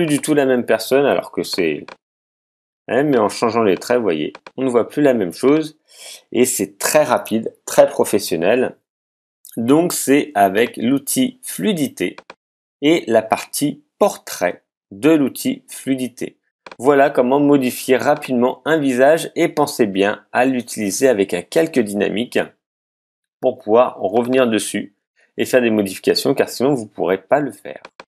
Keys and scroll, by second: 1.1 z.